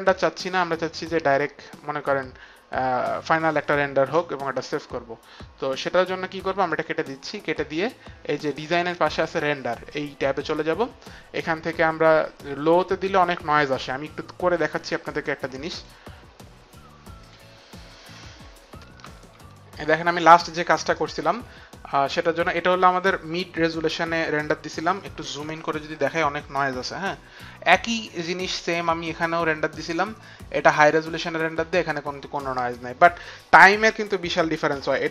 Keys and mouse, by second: 6.7 click, 9.9 click, 15.7 click, 18.9 click, 28.4 click.